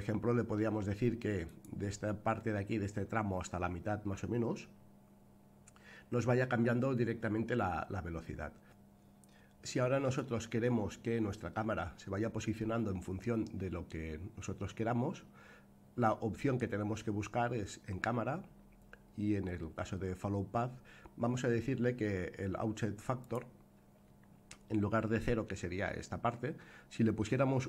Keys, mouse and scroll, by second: 1.4 click, 8.6 click, 23.2-27.6 drag.